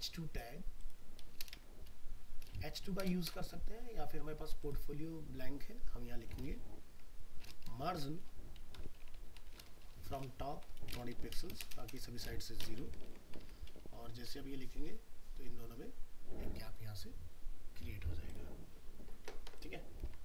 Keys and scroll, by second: 13.0 ctrl+s, 13.4 alt+Tab, 20.1 alt+Tab.